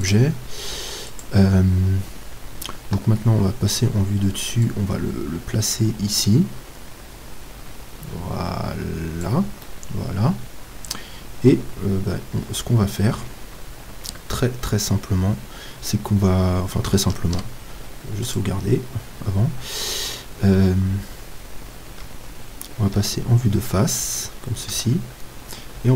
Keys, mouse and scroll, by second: 1.8 Tab, 3.0 KP_7, 4.6-9.7 drag, 9.7-11.5 middle drag, 17.2 ctrl+s, 22.0 KP_1, 22.9 KP_3, 24.7-25.9 middle drag, 24.7 z.